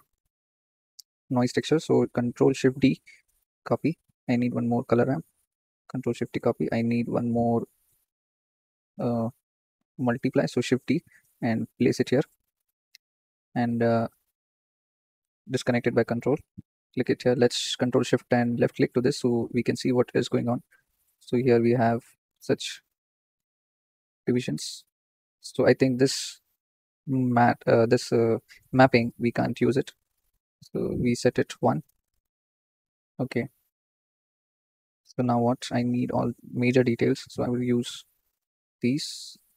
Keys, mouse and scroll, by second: 0.7 click, 2.7 ctrl+shift+d, 3.9 click, 4.6 ctrl+shift+d, 6.2 click, 10.6 shift+d, 15.1 ctrl+right click, 16.1-16.8 drag, 18.5 ctrl+shift+click, 18.9-23.3 drag, 24.6-25.3 drag, 25.3-25.8 scroll down 5, 25.8 click, 26.5 shift+d, 28.7-29.3 drag, 30.8-39.5 drag.